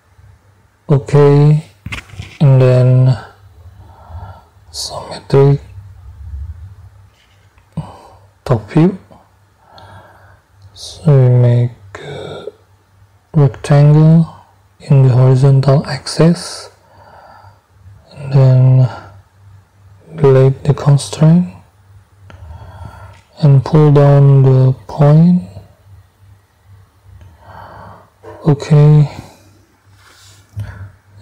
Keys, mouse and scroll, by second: 0.6 click, 3.8 click, 4.6-4.9 scroll down 2, 7.0 click, 8.2-8.6 scroll up 2, 12.1 click, 14.1 click, 16.0 click, 16.9 right click, 20.2 middle click, 21.6 Delete, 24.3-27.8 drag.